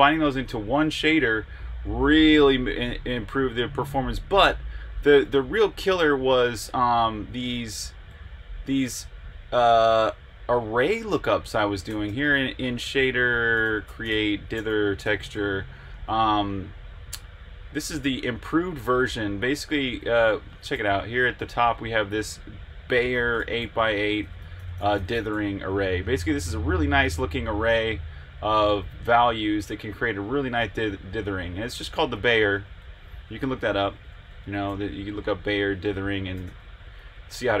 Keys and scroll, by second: 5.9-7.9 typing, 11.6-16.3 typing, 19.8-25.8 typing, 26.3 Escape, 30.6-34.4 typing, 35.9 Escape, 36.1-36.9 typing.